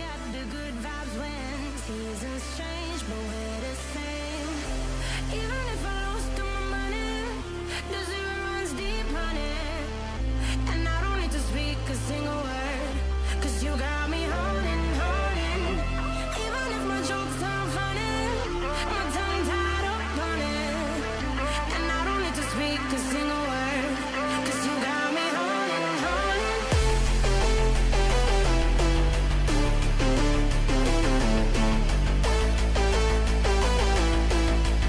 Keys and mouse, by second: 0.1 g, 1.8 click, 2.0 g, 5.2 KP_1, 5.8 KP_7, 8.5 g, 11.3 g, 14.5-17.6 drag, 14.8 g, 19.7 g, 21.3 click, 22.3 click, 23.0 KP_3, 23.5 g, 26.0 g, 26.8 r, 27.8 g, 29.8 g, 32.0 ctrl+z, 32.3 g.